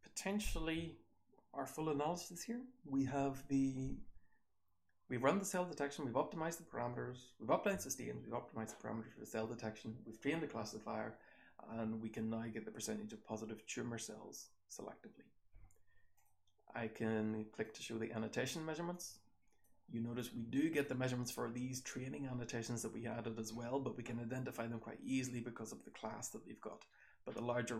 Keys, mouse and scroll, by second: 1.0-6.4 scroll down 1, 6.4-11.7 scroll down 1, 11.7-16.1 scroll down 1, 16.1 click, 16.1-17.0 scroll down 1, 17.0-17.8 scroll down 1.